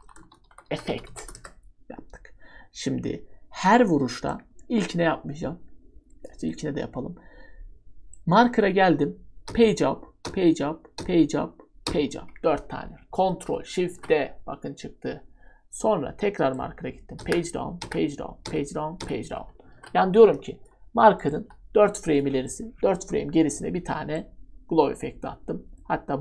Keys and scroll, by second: 0.0-1.1 typing, 1.2 Return, 4.6-5.4 typing, 9.5 Page_Up, 10.2 Page_Up, 11.0 Page_Up, 11.8 Page_Up, 13.9 ctrl+shift+d, 17.2 Page_Down, 17.8 Page_Down, 18.4 Page_Down, 19.7 ctrl+shift+d, 20.6 Delete, 21.4 Delete, 23.0 Delete.